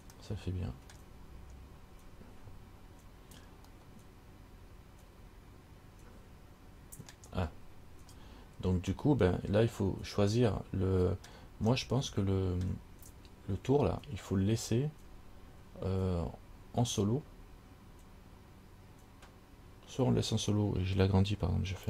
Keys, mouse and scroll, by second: 0.4 middle click, 1.8-2.3 scroll down 2, 4.0 middle click, 9.2 middle click, 12.0 middle click, 14.8-15.4 scroll down 6, 15.9 scroll up 3.